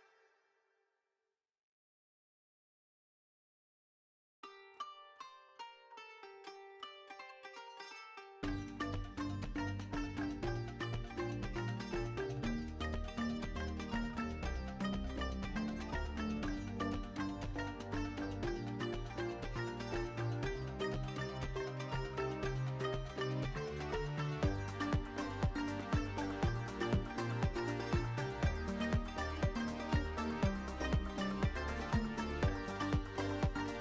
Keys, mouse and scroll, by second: 1.0 shift+a, 3.3 ctrl+alt+KP_0, 3.7 q, 4.3 middle click, 7.6-10.0 drag, 10.3 ctrl+z, 12.5 alt+shift+middle click, 13.3 q, 13.6 click, 16.0 shift+a, 17.5 s, 19.2 click, 20.6 click, 22.1 s, 22.2 x, 22.9 Tab, 23.4 2, 23.5 2, 23.8 click, 24.4 e, 25.2 z, 25.7 click, 26.4 ctrl+b, 27.4 click, 27.5 Tab, 27.7 middle click, 27.9-28.4 drag, 28.8 ctrl+b, 30.9 shift+middle click.